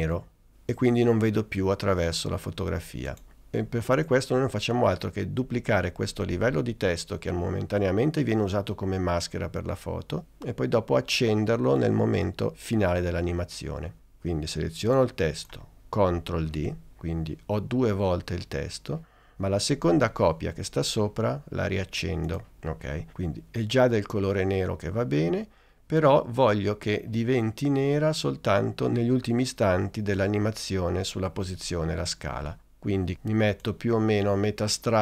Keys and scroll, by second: 16.6 super+d.